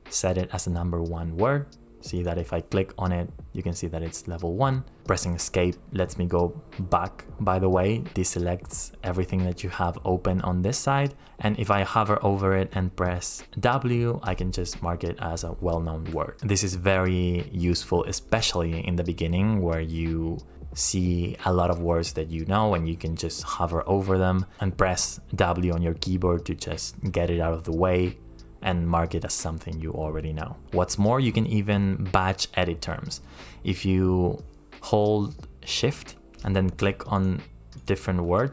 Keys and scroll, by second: 5.3 Escape, 13.6 w.